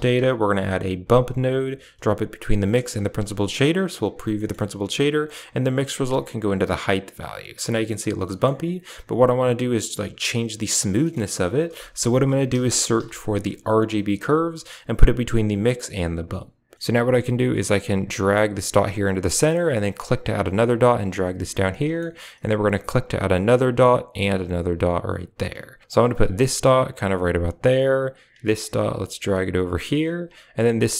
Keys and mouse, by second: 2.8 ctrl+shift+click, 3.3 click, 3.8 click, 4.2 middle click, 4.8 drag, 5.6-6.0 drag, 6.4 click, 8.1 middle click, 10.9 middle click, 11.4 shift+a, 16.0 click, 17.8-19.2 drag, 20.0 click, 20.6 click, 21.9 middle click, 22.8 click, 23.1 click, 24.1 click, 24.7 click, 25.8 click, 26.2 click, 27.7 click, 28.5 click, 30.6 click.